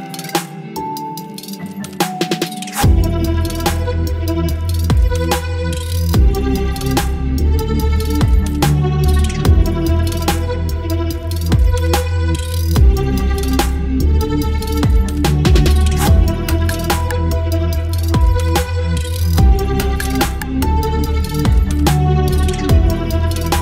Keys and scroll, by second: 0.9 space, 2.0 Delete, 2.1 space, 2.6 v, 3.7 ctrl+t, 4.5 space, 12.0 Return, 12.8 ctrl+t, 15.2 Return, 15.5 space, 16.1 space, 18.0 Delete, 18.2 space, 21.0 Delete, 21.2 space, 22.7 ctrl+BackSpace, 22.9 space.